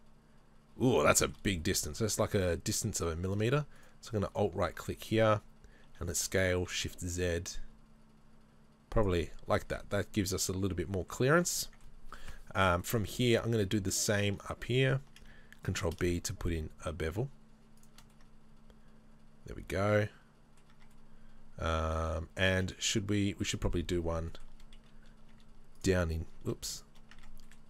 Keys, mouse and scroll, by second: 1.1-3.0 shift+middle drag, 3.0-5.9 alt+right drag, 5.9 s, 9.4 middle click, 9.4 scroll down 2, 9.7 Tab, 9.8-13.3 middle drag, 11.1-11.6 scroll down 2, 13.3-15.7 right drag, 15.7 ctrl+b, 18.1 middle click, 20.7 Tab, 23.5 z, 24.3 shift+middle click, 25.9 z, 27.2 Tab, 27.5 middle click.